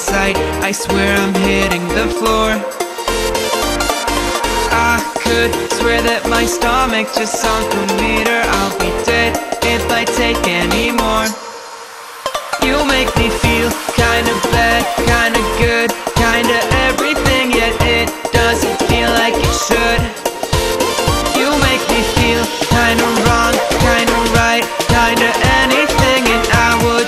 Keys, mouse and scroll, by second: 4.4-5.6 drag, 14.5-15.5 drag, 17.6 click, 18.1 space, 18.2-18.7 click, 18.5 space, 19.2-22.4 drag, 23.0 ctrl+z, 23.5-25.2 drag.